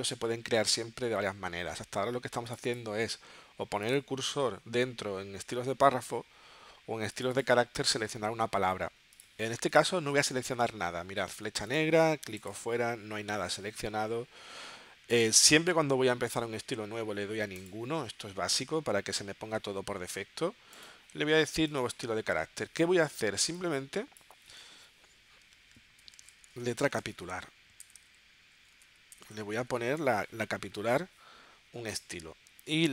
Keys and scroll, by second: 25.7-30.0 typing.